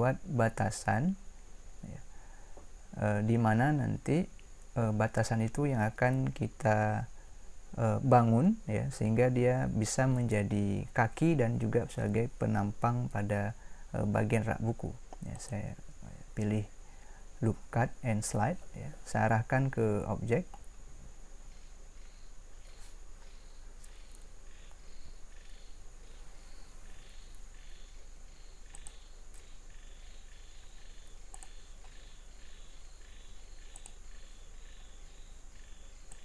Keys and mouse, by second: 15.4-18.5 drag, 31.3-33.5 drag, 33.7-36.2 drag.